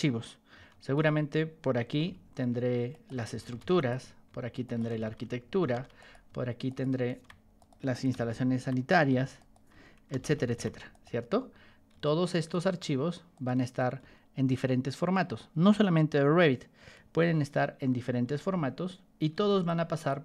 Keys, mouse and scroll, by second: 1.7 y, 2.0 t, 2.8 click, 3.0-6.2 typing, 3.7 click, 4.6 click, 5.9 click, 6.6 shift+click, 7.5 click, 8.2-11.0 typing, 9.3 click, 10.8 click, 12.0 ctrl+click, 13.3 ctrl+click, 14.4 ctrl+click, 17.7 p, 18.2 o, 19.6 ctrl+click.